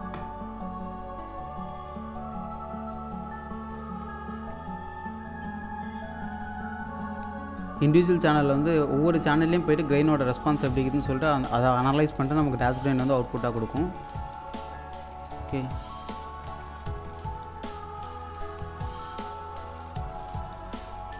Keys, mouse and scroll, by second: 0.2 click, 16.0 click, 16.4-17.3 typing, 18.1-18.5 scroll down 1, 19.7-20.0 scroll up 1, 20.1 alt+click, 20.5 scroll up 1, 21.1 scroll down 1.